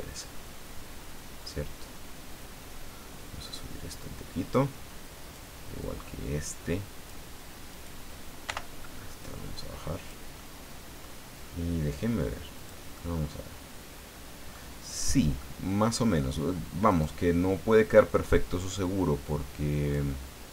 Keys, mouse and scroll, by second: 0.8-1.1 scroll down 1, 1.4-2.1 scroll up 2, 2.3 scroll up 1, 5.2 right click, 5.8-7.3 drag, 7.7 right click, 8.4 o, 9.2 click, 10.4 middle click, 11.2 scroll down 1, 12.6 click, 12.9-14.7 middle drag, 15.4 middle click, 16.9 right click, 18.6-20.1 drag.